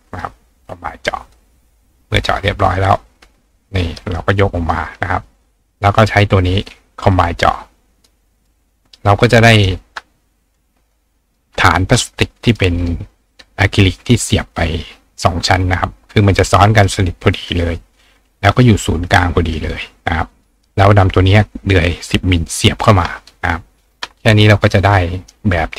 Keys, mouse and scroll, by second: 0.2-1.3 drag, 1.3-2.2 drag, 2.4 click, 4.7 ctrl+click, 4.8-5.8 ctrl+right drag, 5.7 click, 7.1 click, 8.1 click, 8.5 click, 9.3 click, 10.9 click, 12.5 click, 13.1-16.9 drag, 18.0 click, 19.1 click, 19.9 click, 24.8 click, 25.2 right click.